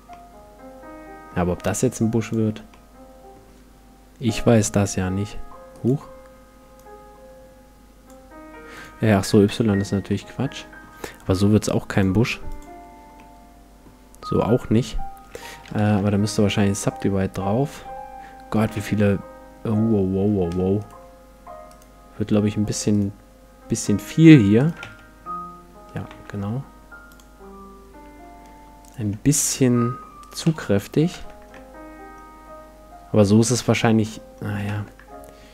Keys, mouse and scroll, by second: 0.1-2.3 middle drag, 2.3-3.9 drag, 2.7-4.8 middle drag, 4.8-6.6 drag, 6.7-8.5 drag, 8.7-10.5 drag, 10.1-11.9 middle drag, 11.9-13.7 drag, 13.1-15.1 middle drag, 16.0 ctrl+1, 16.5 middle click, 18.7 Tab, 20.8-26.3 right drag, 24.8 x, 26.1 x, 28.8-32.1 right drag, 30.5 x, 31.1 Tab, 31.5-33.4 middle drag, 34.7 Tab.